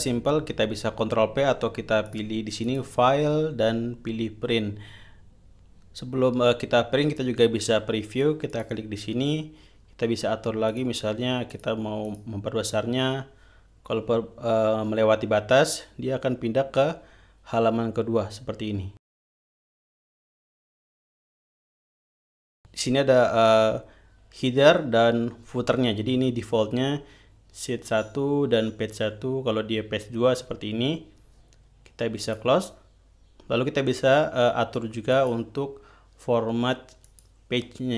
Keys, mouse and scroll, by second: 2.6 click, 3.2 click, 9.0 click, 11.2 click, 12.0 click, 12.6 click, 16.3 scroll down 2, 16.8 scroll down 2, 20.4 scroll up 2, 29.6 scroll down 2, 32.7 click, 35.6 click, 37.6 click.